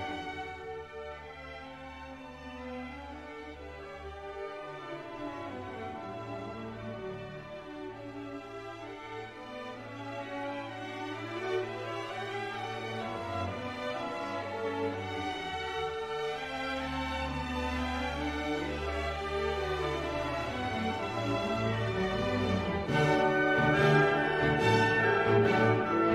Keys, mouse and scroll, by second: 0.5 click, 1.5 click, 2.4 click, 3.2 1, 3.7 0, 4.5 click, 5.6 7, 5.9 0, 6.6 click, 7.3 click, 8.8-10.2 drag, 10.8-13.4 drag, 14.1 click, 15.5 3, 15.9 5, 16.9-18.6 drag, 18.7-20.9 drag, 21.0 click, 21.8 click, 22.2 click, 22.7-23.0 scroll down 1, 23.2 click, 25.0 click, 25.5 middle click.